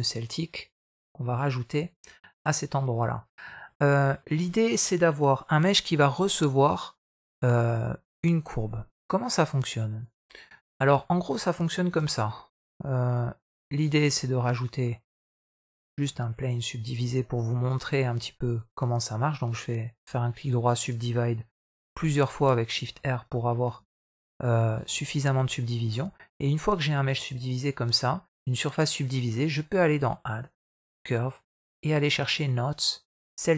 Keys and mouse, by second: 3.4 middle click, 3.9 middle click, 7.3 shift+middle click, 9.9 drag, 10.4 click, 10.9 middle click, 11.7 shift+a, 14.7 middle click, 15.9 Tab, 17.7 shift+middle click, 18.3-20.7 right drag, 21.5 shift+r, 22.9 middle click, 23.2 middle click, 24.2 shift+r, 24.9 middle click, 25.3 middle click, 25.9 Tab, 30.3-33.4 drag.